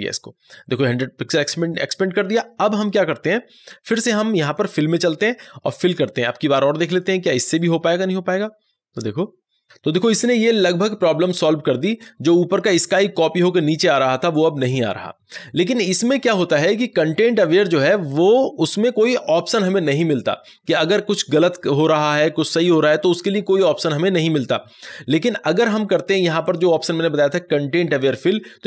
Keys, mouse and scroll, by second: 4.3 click, 4.4 click, 9.6 ctrl+z, 26.3 ctrl+d, 26.5 click.